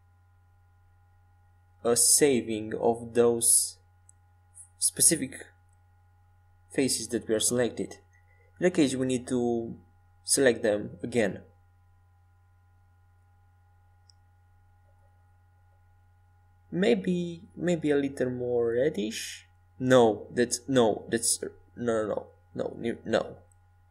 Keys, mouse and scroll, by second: 4.7-6.9 drag, 6.2-8.2 middle drag, 8.4-15.6 drag, 16.8-18.9 middle drag, 17.6 Tab, 19.5-23.9 drag.